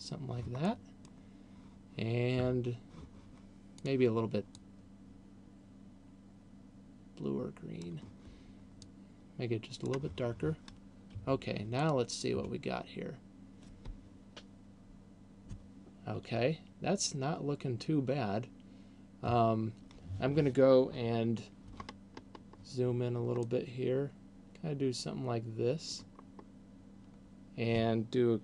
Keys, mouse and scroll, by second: 1.0 middle click, 4.0 click, 19.5 Escape, 22.0-23.0 scroll up 4, 23.5 middle click, 26.8-28.0 scroll up 1.